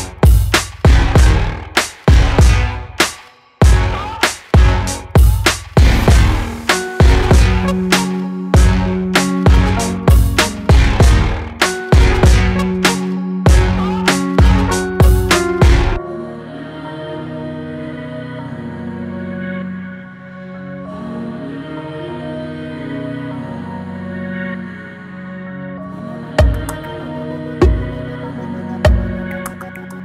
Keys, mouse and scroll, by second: 0.0 x, 1.0 Tab, 1.6-3.0 middle drag, 3.0 click, 4.4-7.8 drag, 7.8-9.2 middle drag, 9.2 Tab, 9.9 ctrl+r, 13.9 scroll up 2, 14.5 middle click, 15.3 alt+click, 16.1 alt+shift+click, 16.6 middle click, 17.3-18.3 scroll down 1, 18.3 r, 21.7-23.3 middle drag, 23.3 click, 24.1 alt+click, 24.8 alt+shift+click, 25.3 alt+shift+click, 25.7 alt+shift+click, 26.1 alt+shift+click, 26.5 alt+shift+click, 27.0 middle click, 27.7-28.5 scroll up 1, 28.5 ctrl+b.